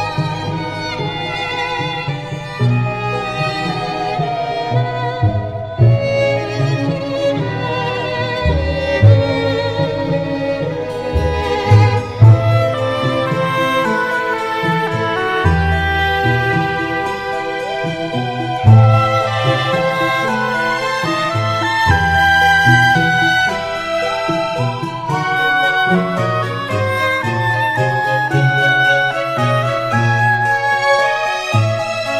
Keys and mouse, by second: 5.1 middle click, 6.6 middle click, 16.2 middle click, 17.0 middle click, 18.0 middle click, 20.5 middle click, 21.3 middle click, 25.7 middle click, 27.2 middle click, 31.9 middle click.